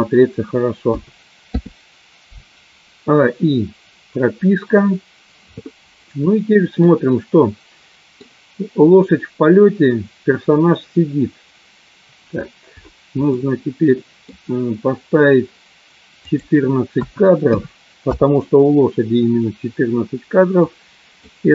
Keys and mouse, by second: 1.9 i, 7.1-8.2 middle drag, 13.5 middle click, 16.2-18.2 drag, 20.6 click.